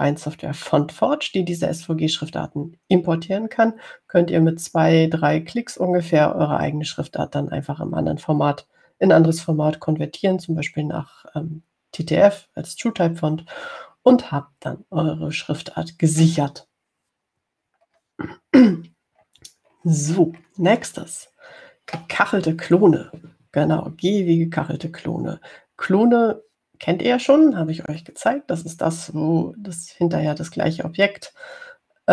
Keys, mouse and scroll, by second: 19.1 scroll down 2, 20.5 scroll down 2, 21.1-22.7 scroll down 4.